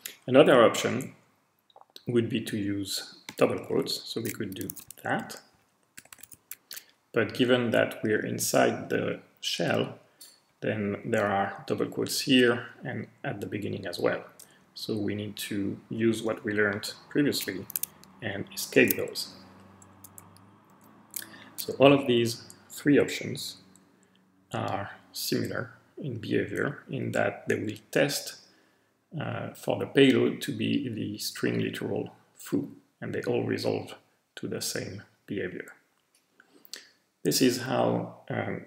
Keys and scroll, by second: 2.5 Right, 2.8 Right, 3.6-4.7 typing, 4.9 Left, 5.0 Left, 5.2 Left, 5.5 Left, 6.0-8.2 typing, 8.3 Right, 8.8 Tab, 8.9 Right, 9.7 Right, 10.3 Right, 10.9 Right, 14.6 Left, 15.1 Left, 15.2 Left, 15.3 shift+Tab, 15.4 Left, 15.5 Left, 15.5 Left, 16.3 shift+Tab, 18.5 alt+shift+;, 19.3 Right, 19.4 Right, 19.5 Right, 19.9 Right, 20.7 alt+shift+;.